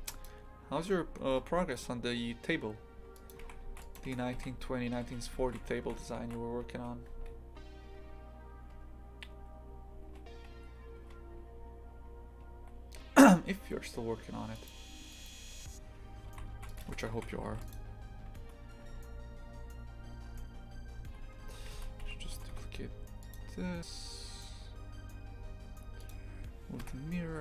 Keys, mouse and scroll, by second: 0.8 Tab, 1.2 g, 3.4 shift+f, 15.1-16.3 right drag, 16.3 shift+f, 18.3 Tab, 18.8 Tab, 21.7 shift+d, 22.3 g, 26.1 click, 26.8 KP_7.